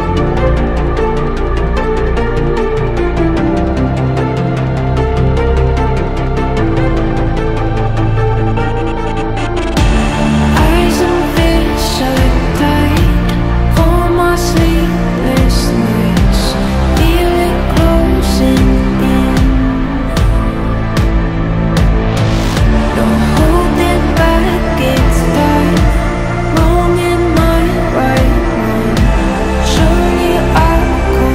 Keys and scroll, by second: 8.3 c, 8.9 c, 11.4 Delete, 16.2 Delete.